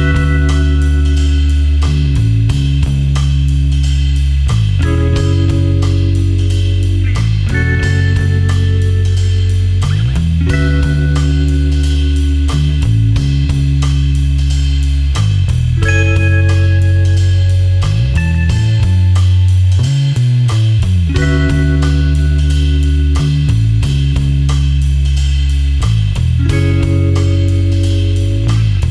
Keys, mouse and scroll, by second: 0.4 space, 0.6 ctrl+click, 2.9 ctrl+alt+click, 12.1 ctrl+alt+click, 15.2 ctrl+alt+click, 17.2 alt+click, 18.8 alt+click, 25.7 ctrl+space, 26.3 ctrl+click, 26.4-28.8 typing, 26.7 click, 27.1 click, 27.3 click, 28.3 click.